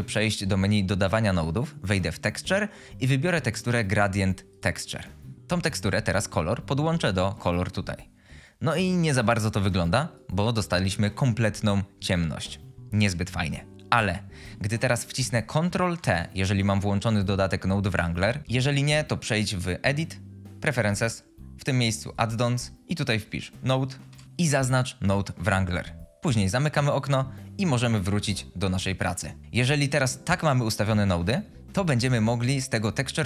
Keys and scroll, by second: 15.7 ctrl+t, 18.5 Insert, 28.8 Insert.